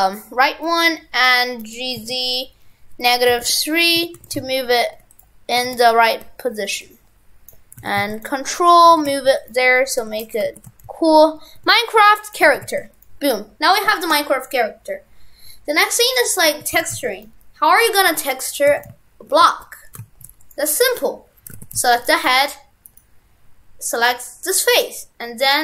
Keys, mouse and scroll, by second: 4.2 shift+f, 5.7 shift+d, 6.8 ctrl+click, 7.8 shift+f, 8.7 right click, 8.9 right click, 9.0 shift+f, 10.0 n, 10.5 shift+f, 12.6 shift+f, 13.7 right click, 18.3 click, 18.7 shift+f, 20.9 right click, 21.5 shift+f, 22.3 Tab, 22.9 right click, 23.8 click, 24.5 right click.